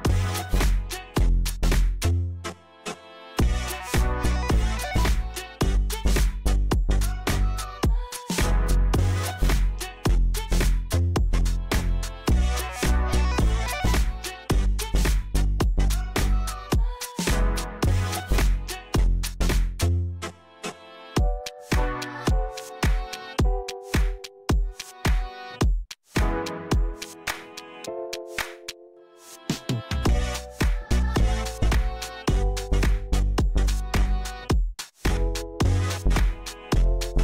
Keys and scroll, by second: 3.4 Tab, 4.7 KP_7, 5.1 shift+z, 6.0 shift+d, 6.4 Tab, 7.0 a, 12.5 Tab, 13.8 shift+d, 14.4 Tab, 15.0 a, 17.6 shift+z, 21.7 KP_7, 22.2 Tab, 22.6 shift+z, 23.7 shift+d, 24.1 Tab, 26.4 Tab, 28.4 shift+a, 30.1 Tab, 30.6 s, 34.0 s.